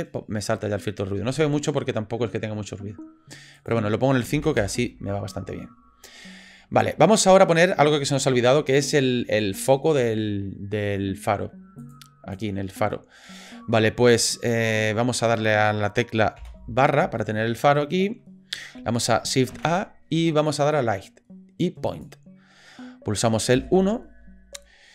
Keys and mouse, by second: 3.7-5.1 drag, 11.9 click, 16.4 KP_Divide, 17.7 click, 19.5 shift+a, 23.6 KP_1.